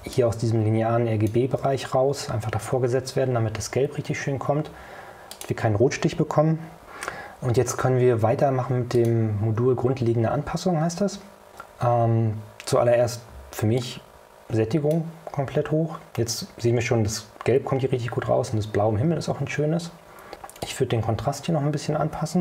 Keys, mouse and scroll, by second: 0.2-1.6 ctrl+shift+drag, 5.4 click, 9.1 click, 13.9-15.2 drag, 20.7-22.4 drag.